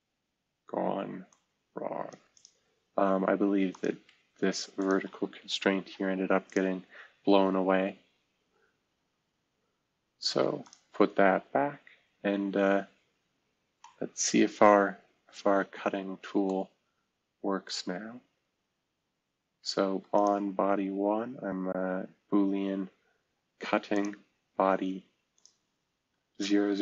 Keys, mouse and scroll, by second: 0.4-0.9 scroll up 1, 5.8 v, 6.8-7.7 scroll down 1, 8.3-9.1 scroll up 1, 9.8 scroll up 1, 10.6 click, 13.0 scroll down 1, 13.4-13.8 scroll up 1, 17.6-18.9 drag.